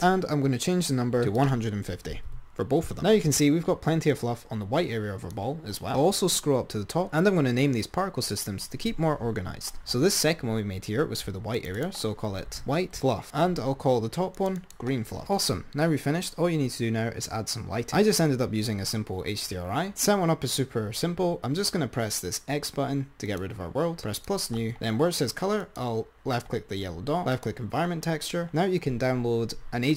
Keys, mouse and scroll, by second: 1.4-2.9 drag, 4.4 click, 12.3 click, 17.8 click, 23.6-25.9 drag, 27.8 click.